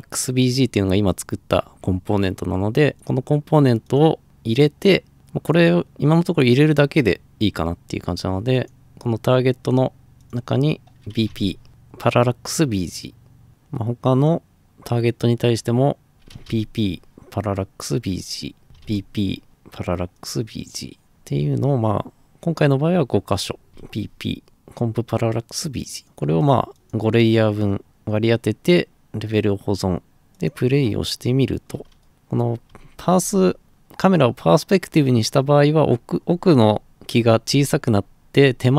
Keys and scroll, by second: 10.9-11.8 typing, 16.1-17.0 typing, 18.6 typing, 23.4-24.2 typing, 32.0-33.3 typing, 36.2-38.7 typing.